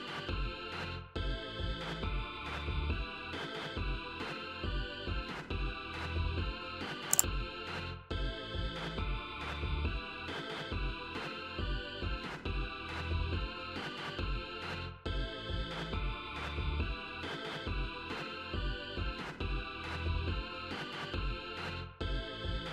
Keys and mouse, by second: 2.1 click, 8.8 click, 11.3 click, 12.2 click, 14.7 click, 15.4 click, 16.1 click, 16.8 click, 17.5 click, 18.5 click.